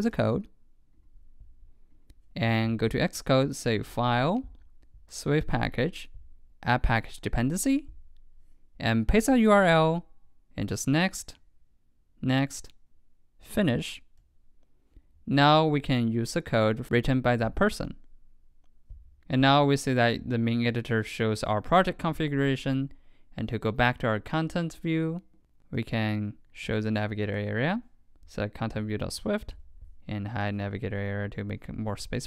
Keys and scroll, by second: 9.1 super+v.